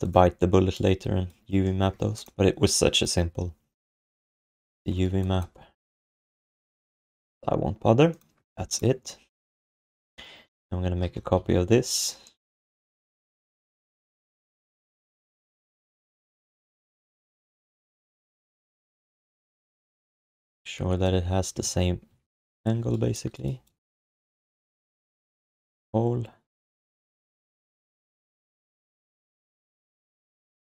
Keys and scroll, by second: 5.5 f, 11.0 ctrl+d, 11.3 w, 14.5 v, 15.9 f, 19.1 e, 20.5 space, 21.1 f, 21.6 alt+q, 22.1 alt+q, 22.4 space, 26.9 w, 28.6 space, 29.0 space.